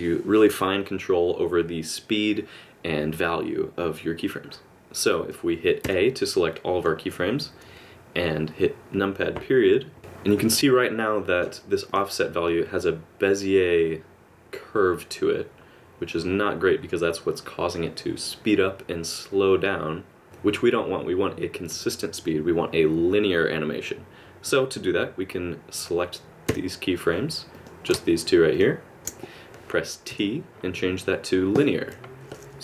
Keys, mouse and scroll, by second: 5.8 a, 9.3 KP_Decimal, 10.0 click, 10.4 middle click, 11.9 click, 12.5 click, 26.5 a, 27.5 click, 28.5 shift+click, 30.1 t.